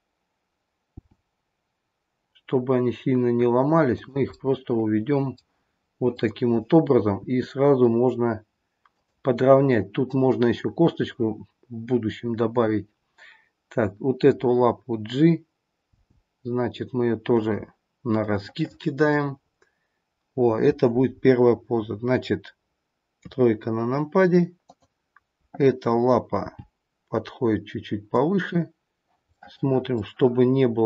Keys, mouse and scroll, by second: 0.9 g, 4.3 middle click, 6.0 click, 7.4 r, 14.1 click, 15.9 g, 18.2 scroll up 1, 18.4 middle click, 19.3-21.1 scroll down 3, 23.1 KP_3, 24.6 click, 26.3 g, 29.3 middle click, 29.8 middle click.